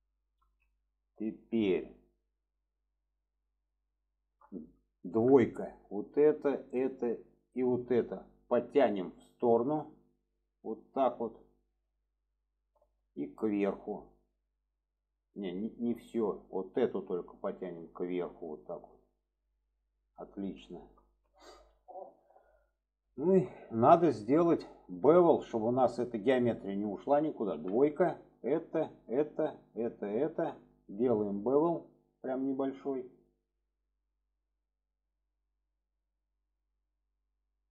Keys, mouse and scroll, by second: 0.8 middle click, 2.4 middle click, 3.4 middle click, 4.1 shift+middle click, 5.8 drag, 6.5 click, 7.5 click, 9.0 middle click, 10.0 click, 11.5-13.0 middle drag, 13.6 click, 16.7 click, 17.4 click, 19.8 click, 20.7 shift+middle click, 21.2-21.7 middle drag, 22.0-22.8 middle drag, 23.2 shift+middle drag, 24.0 shift+middle click, 28.3-29.3 drag, 31.4 click, 32.6-36.7 drag.